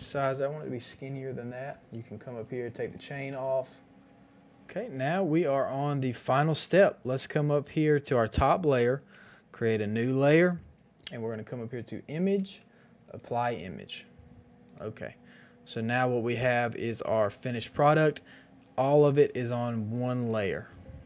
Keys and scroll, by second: 0.0 ctrl+t.